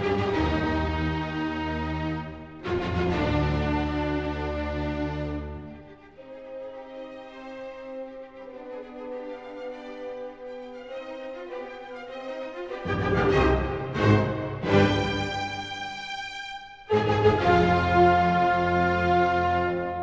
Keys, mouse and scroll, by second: 0.4-0.8 scroll, 1.3 scroll, 1.6 ctrl+middle click, 2.3-2.9 scroll, 3.8 click, 4.5 right click, 6.0 click, 7.5 ctrl+click, 7.9-8.5 ctrl+scroll, 8.5 n, 10.4-10.7 scroll, 10.7 s, 11.4 click, 11.8 middle click, 12.4 middle click, 13.1 click, 14.6 click, 16.0-17.0 middle drag, 17.8-18.8 middle drag, 19.3 click.